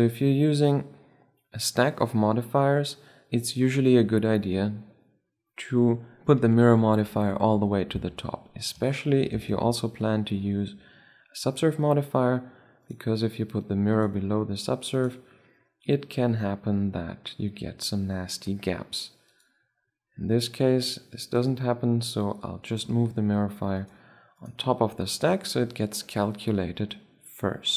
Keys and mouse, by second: 9.1 ctrl+2, 12.5-16.4 drag, 19.0-20.8 drag, 21.1-25.7 drag, 25.7 click, 25.9-27.7 middle drag.